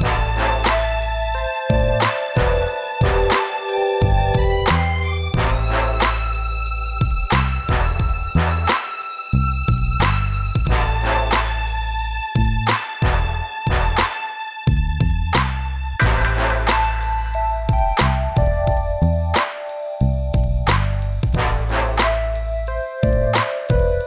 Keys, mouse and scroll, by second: 0.8 click, 3.8 scroll down 2, 8.0 shift+Return, 8.4 scroll up 2, 10.4 click, 14.8 scroll up 1, 15.9 click, 16.0 click, 19.2 click, 19.3 click, 19.7 scroll down 1, 21.7 middle click, 22.6 scroll down 1, 23.3 middle click.